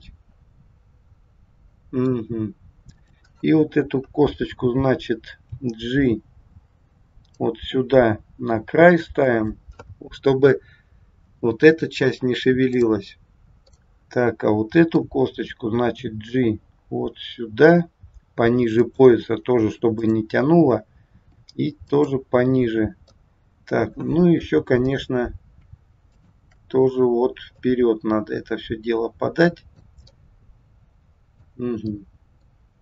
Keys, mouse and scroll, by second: 2.9 click, 5.5 g, 12.6 click, 13.7 middle click, 16.0 g, 19.9 click, 21.1 g, 23.1 middle click, 24.8 click, 26.0 shift+click, 27.5 click, 30.1 middle click, 32.0 middle click.